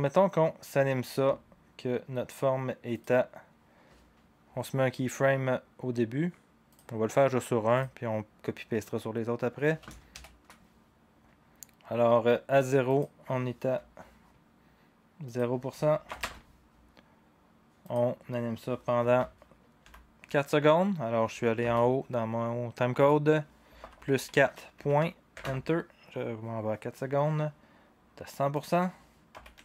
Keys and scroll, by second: 10.1 ctrl+shift+h, 16.1 0, 16.2 Return, 20.6 typing, 21.6 Escape, 24.8 typing, 25.3 Return, 28.3-29.6 typing.